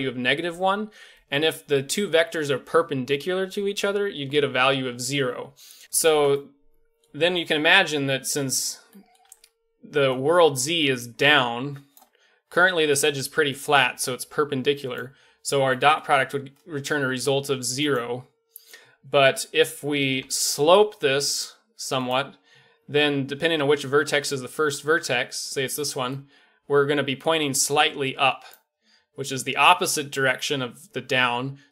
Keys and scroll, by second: 9.3-10.0 d, 10.1 d, 11.9 d, 12.0 d, 12.7-13.5 d, 14.9 d, 15.0 d, 20.6 g, 24.9-26.0 d, 28.5 d, 28.5 d, 28.6 d, 28.7 d.